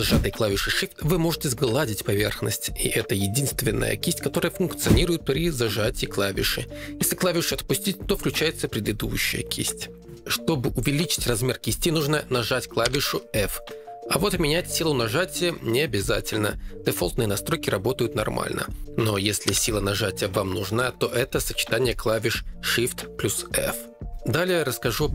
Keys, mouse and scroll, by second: 1.1 2, 1.8 shift+click, 12.8 f, 14.2 click, 14.5 f, 15.5 click, 16.3 f, 17.2 click, 18.4 click, 18.7 f, 19.5 alt+f.